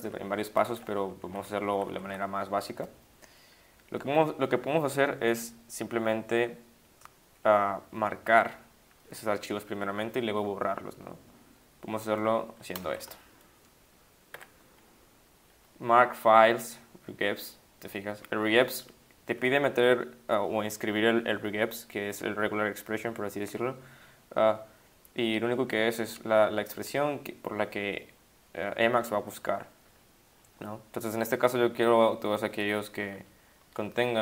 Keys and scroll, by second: 0.0 ctrl+shift+Left, 0.2 ctrl+shift+Left, 0.7 ctrl+Right, 1.0 Left, 1.4 Up, 1.7 Up, 1.9 Up, 2.0 Up, 12.9 shift+5, 14.1-14.8 typing.